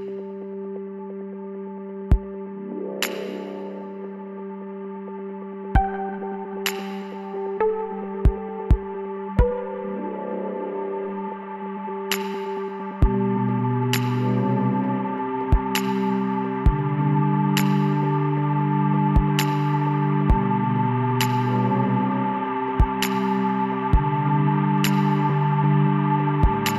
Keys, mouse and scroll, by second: 2.6-5.3 middle drag, 11.0-14.0 middle drag, 14.0 KP_5, 17.1-20.2 middle drag, 20.4-23.6 middle drag, 23.7-25.5 middle drag, 25.5 KP_5, 26.6 middle click.